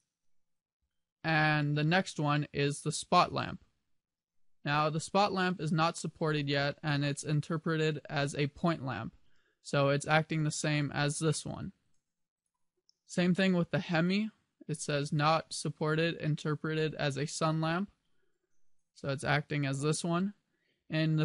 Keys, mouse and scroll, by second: 3.2 click, 9.6 click, 11.6 click, 12.0 click, 14.0 click, 18.8 click, 19.4 click.